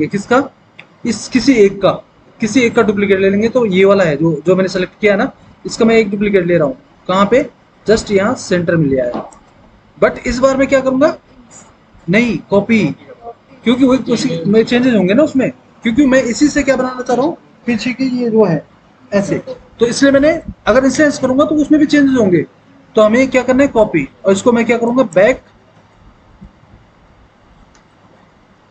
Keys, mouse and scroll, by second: 25.0 click, 25.9 BackSpace, 26.4 BackSpace, 27.0 BackSpace.